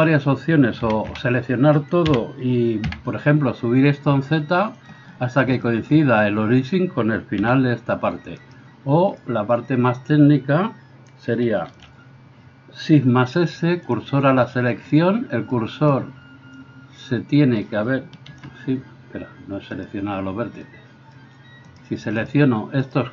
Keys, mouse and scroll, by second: 0.9 a, 1.1 a, 2.2 g, 5.0-21.7 middle drag, 7.5 g, 11.7 shift+s, 18.3 shift+s, 21.7 right click, 21.9 shift+middle click, 22.2 shift+right click, 22.4-23.1 shift+middle drag.